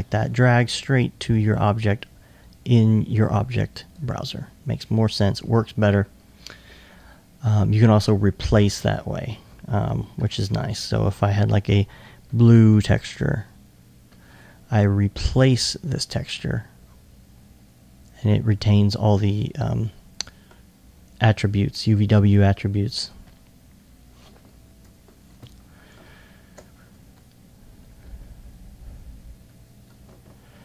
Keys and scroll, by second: 27.0 alt+1.